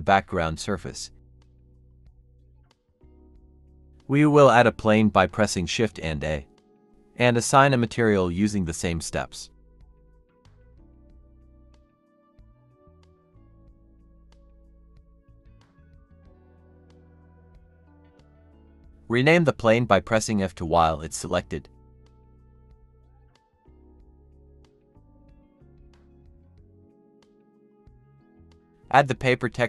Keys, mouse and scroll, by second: 4.0 scroll down 1, 5.1 a, 6.7 s, 10.7-12.2 typing, 12.9 Escape, 13.5-16.6 typing, 18.3 double click, 19.0 F2, 19.6-22.2 typing, 22.7 Return, 24.2 double click, 25.5-25.9 typing, 26.0 Return.